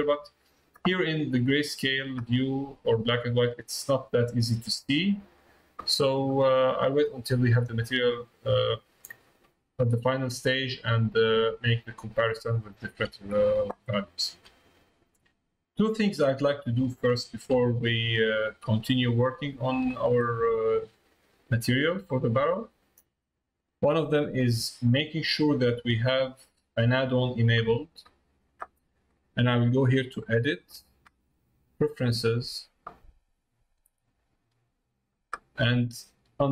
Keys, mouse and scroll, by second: 2.5 middle click, 3.4 middle click, 4.8 middle click, 6.2 middle click, 8.0 middle click, 8.8 middle click, 9.9 middle click, 10.6 middle click, 12.8 middle click, 14.0 shift+middle click, 14.7 middle click, 16.1 middle click, 16.8 shift+middle click, 18.6-19.7 middle drag, 20.5 middle click, 26.0-27.2 middle drag, 30.1-32.5 drag.